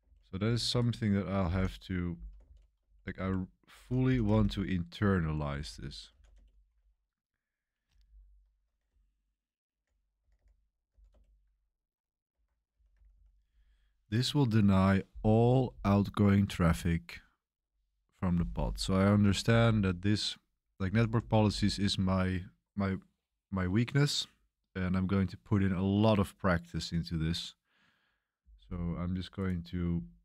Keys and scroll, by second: 0.0-2.4 typing, 0.6 Escape, 3.7 Escape, 4.9-13.2 typing, 12.3 Escape, 19.0 Escape, 19.4-21.9 typing, 23.4 typing.